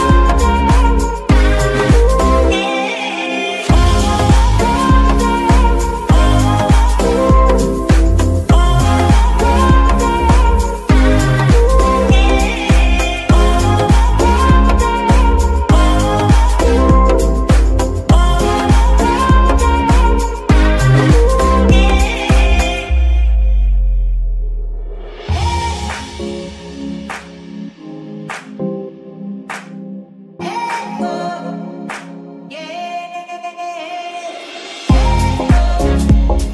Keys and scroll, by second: 1.6 ctrl+Tab, 6.5 g, 7.9 Escape, 8.5 g, 9.6 Escape, 10.4 g, 13.9 Escape, 16.2 shift+z, 25.3-29.7 typing, 30.7 ctrl+Tab, 31.1 ctrl+z.